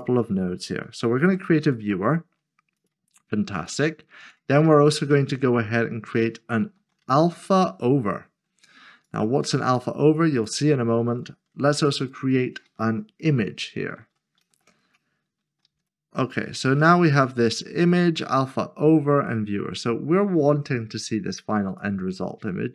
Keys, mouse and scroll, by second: 1.2-1.6 typing, 5.6 click, 6.7-7.5 typing, 9.1 click, 12.0 click, 14.0-15.8 typing, 17.1 click, 20.5 click.